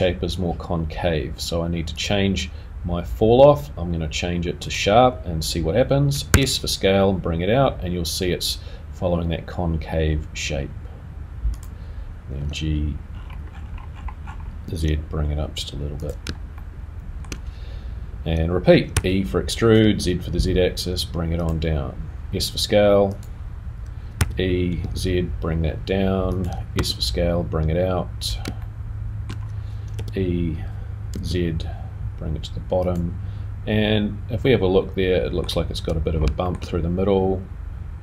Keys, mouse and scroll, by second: 1.9 click, 13.2 g, 16.5 shift+middle click, 18.9 r, 27.2 s, 28.6 shift+middle click, 29.9 e, 34.4 middle click, 36.0-36.6 scroll down 2, 36.6 shift+middle click.